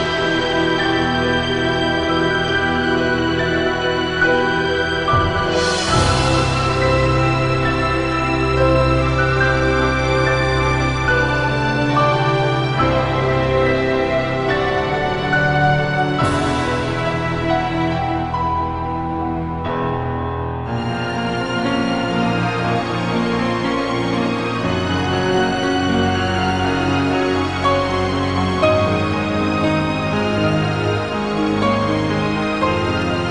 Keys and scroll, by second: 6.2 -, 16.7 -, 20.9 ctrl+z, 23.7 i, 25.1 ctrl+z, 25.9 ctrl+z, 26.6-27.0 typing, 29.0 typing, 32.1 typing.